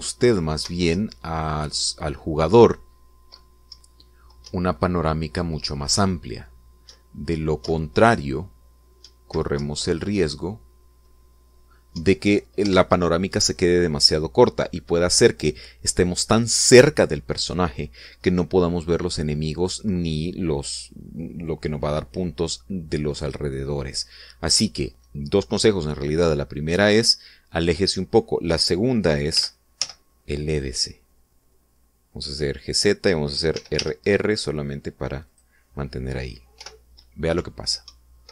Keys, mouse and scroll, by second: 1.8 Left, 5.3 Up, 7.7 Right, 8.4 Up, 9.9 Right, 10.4 Left, 12.8 Down, 13.5 Escape, 30.2 g, 30.6 z, 33.5 click, 34.4 r, 36.1 click, 37.4 p, 38.2 Up.